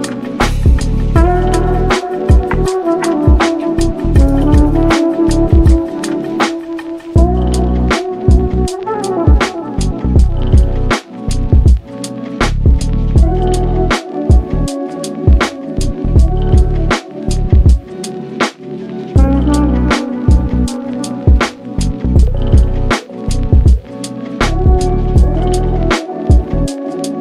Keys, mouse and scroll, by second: 1.0-2.2 drag, 2.5-3.0 middle drag, 3.0 ctrl+s, 3.4 shift+middle click, 3.9-5.0 scroll up 9, 4.6 click, 5.4-6.0 middle drag, 6.0 shift+d, 6.7 g, 7.6 click, 8.3-10.0 drag, 10.0 g, 11.6 click, 11.9 g, 15.8-16.9 scroll down 11, 16.5 click, 16.9 shift+middle drag, 17.2 ctrl+s, 17.5-18.8 middle drag, 18.8 ctrl+s, 19.2 click, 19.5 Tab, 20.5-24.8 drag, 25.5 u.